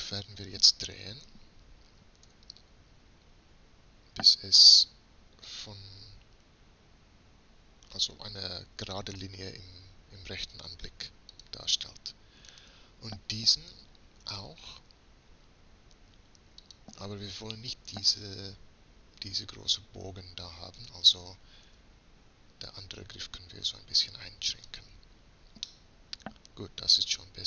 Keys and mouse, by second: 2.4 r, 12.6-14.6 right drag, 14.4 r, 16.0-17.8 right drag, 21.8 s, 26.1-27.4 middle drag.